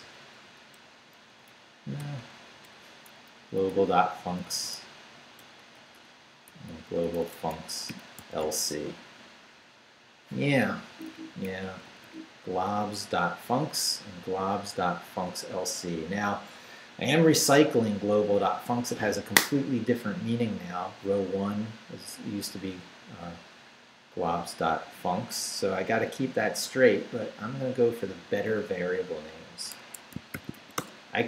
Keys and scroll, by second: 0.0 Down, 0.7 Left, 2.0 BackSpace, 3.3 Down, 4.1 Right, 5.4 BackSpace, 6.7 Right, 8.2 c, 10.9 Down, 11.5 Up, 29.8 Escape, 30.1-31.0 typing.